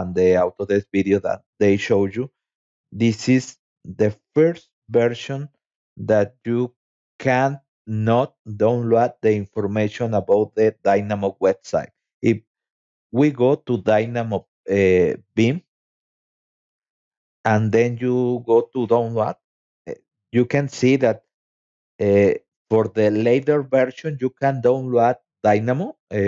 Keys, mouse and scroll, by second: 3.8 scroll down 2, 4.6 scroll down 2, 5.4 scroll down 2, 6.1-9.4 scroll down 13, 10.4 click, 13.1-13.8 scroll down 3, 14.2-14.7 scroll up 2, 15.9 click, 17.0 scroll down 2, 25.6 click.